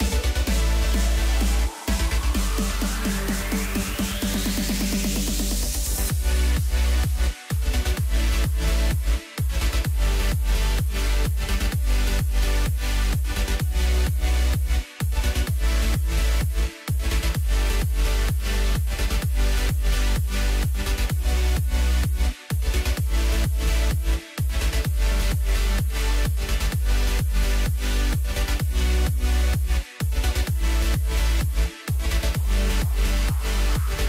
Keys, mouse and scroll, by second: 3.1 ctrl+r, 6.0-7.0 middle drag, 7.0-7.6 scroll down 1, 7.6 Tab, 8.0-10.4 middle drag, 10.4-11.2 right drag, 11.2-14.3 middle drag, 14.3 KP_7, 15.4 Tab, 16.0-17.5 middle drag, 17.5 click, 18.1 click, 18.9 s, 20.5 KP_7, 21.5 Tab, 22.7 Tab, 23.4 Tab, 24.1 scroll up 2, 24.3 scroll down 2, 24.6-27.2 middle drag, 27.2 click, 27.6-28.5 scroll down 2, 28.5 KP_1, 29.2-29.7 scroll up 1, 29.7 Tab, 30.7 a, 32.5 Tab, 33.0-34.0 right drag.